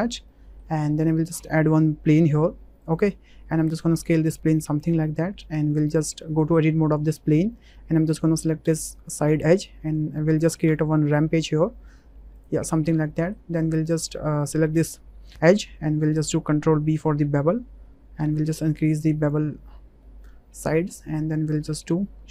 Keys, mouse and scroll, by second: 0.3 drag, 0.9 shift+click, 1.7 shift+a, 3.5 s, 4.8 click, 5.8 click, 5.9 Tab, 7.5 2, 8.6 click, 10.7 e, 11.1 z, 12.3 click, 13.2 shift+click, 13.9 click, 16.2 ctrl+b, 18.2 click, 19.4 Tab, 20.0-20.6 drag, 20.9 click, 21.5-22.3 right drag.